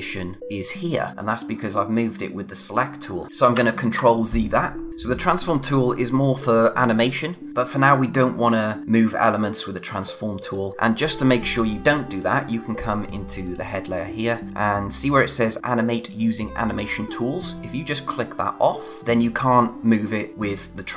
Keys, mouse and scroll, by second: 1.9 click, 3.5 ctrl+z, 12.1 click, 17.8 click.